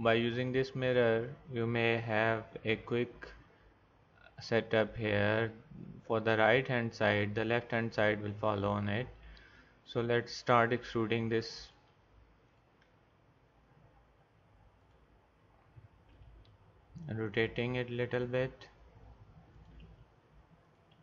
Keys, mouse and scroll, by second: 2.7 g, 11.7 click, 12.9 e, 16.1 r, 17.7 e, 19.9 r, 20.9 e.